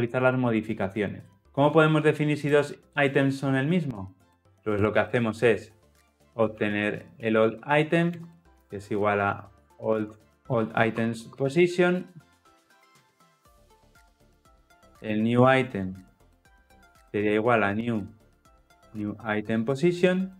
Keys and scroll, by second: 12.8 Return, 19.8 Return.